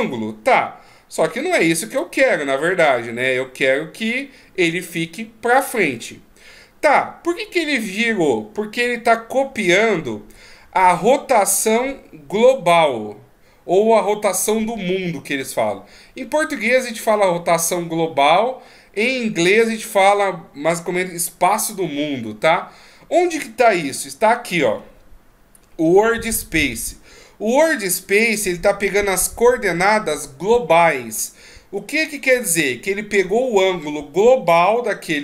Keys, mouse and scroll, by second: 0.3 d, 0.6 scroll up 2, 0.8 d, 0.9-2.5 d, 1.0 d, 1.6 right click, 2.5 right click, 11.2-13.6 scroll down 1.